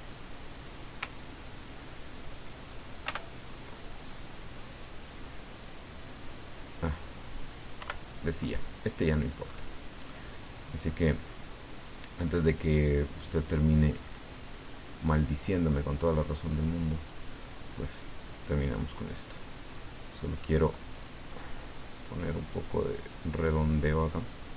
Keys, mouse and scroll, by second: 0.5 click, 1.1 ctrl+click, 3.0 ctrl+g, 4.1 click, 6.0-7.6 drag, 7.8 Delete, 8.5 click, 9.5 middle click, 10.5-13.8 drag, 15.0 click, 17.9 click, 20.4 click, 22.7-24.5 drag.